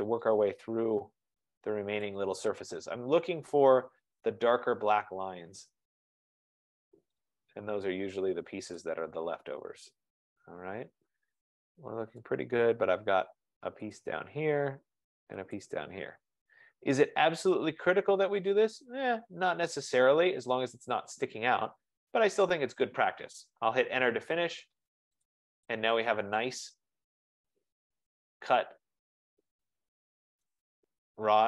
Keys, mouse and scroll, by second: 0.1 F15, 0.3 click, 2.3 click, 4.5 right click, 4.6-5.2 scroll up 5, 5.4-6.2 scroll down 6, 7.3 click, 8.4-8.9 scroll, 8.9 click, 12.2 scroll, 12.7 right click, 14.1 click, 15.8 click, 17.2-17.5 scroll down 2, 18.0 scroll, 18.5-19.0 scroll down 3, 19.6-20.2 scroll up 3, 22.1 right click, 23.2-23.9 scroll, 24.1 Return, 25.4 click, 26.0 scroll, 30.5 right click, 30.8 scroll.